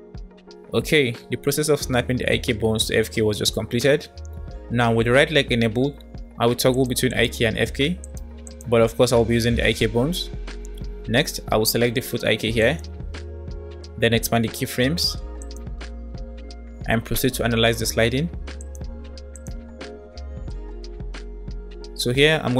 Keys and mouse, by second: 6.6 click, 7.1 click, 7.9 click, 8.5 click, 12.7 click, 15.4 click, 18.7 click, 19.2-22.5 drag.